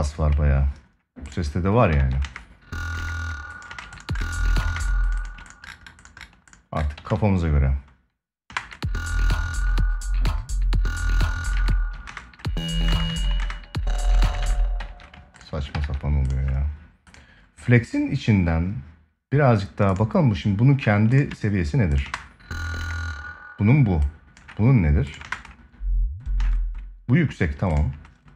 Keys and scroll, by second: 1.7 ctrl+s, 2.0 space, 4.4 space, 6.7 ctrl+s, 8.2 space, 11.3 space, 13.1 ctrl+space, 15.4 ctrl+s, 21.7 space, 24.9 space.